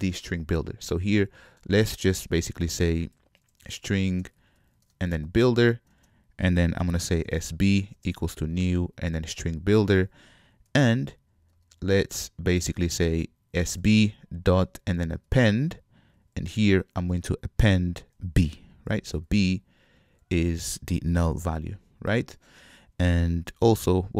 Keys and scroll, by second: 4.1 ctrl+Tab, 5.7 Return, 13.7 Return, 15.4 Return, 19.2 Escape.